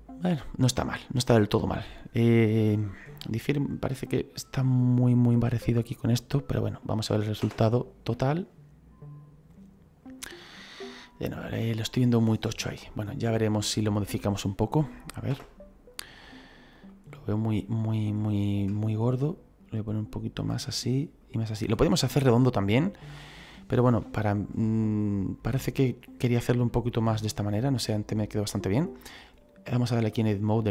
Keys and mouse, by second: 7.3 KP_0, 9.0 right click, 15.2 KP_0, 16.7 click, 17.3 right click, 18.1 middle click, 19.2 click, 21.1 click, 21.9 middle click, 23.2 shift+middle click, 24.7 click, 25.7 middle click, 27.6 click, 29.9 click.